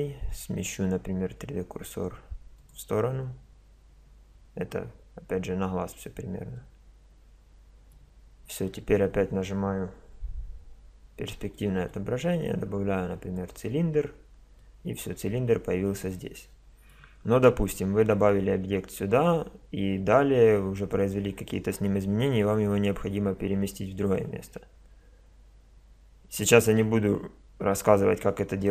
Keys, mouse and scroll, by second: 2.6-4.3 drag, 4.3-11.5 middle drag, 10.3 KP_5, 13.3 click, 14.7-15.4 middle drag, 15.7-16.0 middle drag.